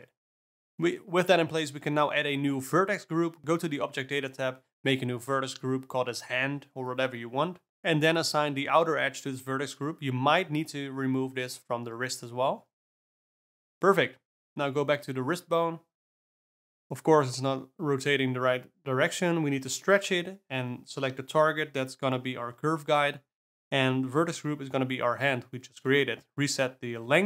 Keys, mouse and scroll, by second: 0.0 Tab, 2.3 click, 3.4-4.3 drag, 4.3-5.3 drag, 5.3 Tab, 7.3 click, 8.4-9.7 drag, 9.7 Tab, 10.5 Tab, 11.7 click, 11.8 Tab, 13.3 click, 13.4 Tab, 14.0 click, 14.7 click, 15.6 click, 18.7-19.3 drag, 22.5 click, 24.4-27.2 drag.